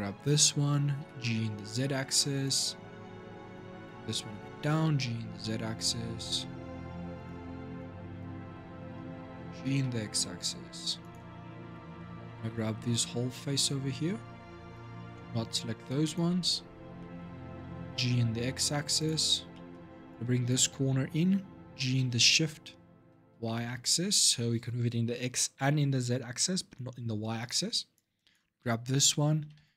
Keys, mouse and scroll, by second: 0.8 g, 3.3-4.5 drag, 4.5 g, 7.5-9.1 drag, 9.1 g, 11.2 scroll down 2, 11.7 shift+middle click, 12.1 scroll down 2, 12.7-14.7 drag, 15.6 shift+click, 16.3 scroll up 2, 16.8 shift+middle click, 17.6 g, 19.3 shift+middle click, 19.9-21.5 drag, 21.5 g, 27.7 click, 29.2 g.